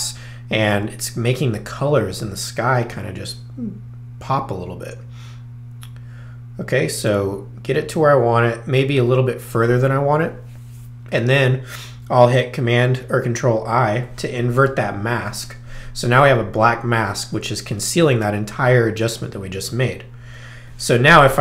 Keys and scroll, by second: 14.0 super+i.